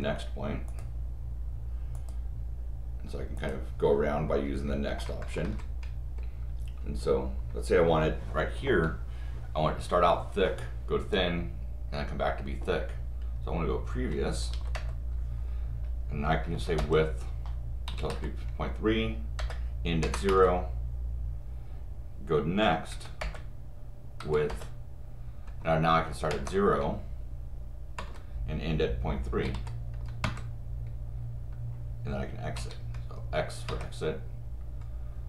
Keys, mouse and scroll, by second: 0.7 click, 1.9 click, 3.4 click, 14.7 Return, 16.8 Return, 19.4 Return, 22.9 n, 23.2 Return, 24.2 w, 24.5 Return.